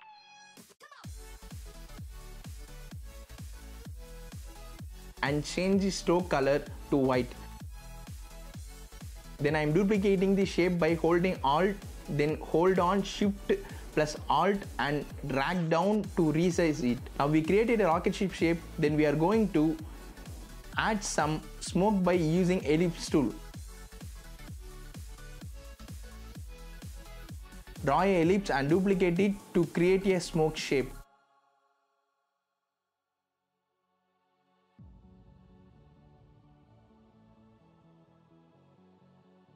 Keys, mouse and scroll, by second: 7.6 scroll down 1, 9.6-12.6 alt+drag, 13.4-14.0 scroll down 1, 15.3 alt+shift+click, 17.2 click, 17.6 z, 17.9 click, 19.2-19.5 scroll up 1, 19.5 click, 23.2 scroll down 1, 25.0 click, 27.2 shift+click, 28.8 shift+i, 29.5 scroll down 1, 29.9 v, 30.0 click, 30.3 z, 30.6 click, 31.4 v, 31.6 click, 33.5 shift+click, 33.8 click, 34.1 alt+click, 34.8 click, 35.0 alt+click, 35.8 click, 36.1 alt+click, 36.8 click, 37.0 alt+click, 37.5 click, 37.7 scroll down 1, 38.1 alt+click, 38.9 shift+click, 39.3 click.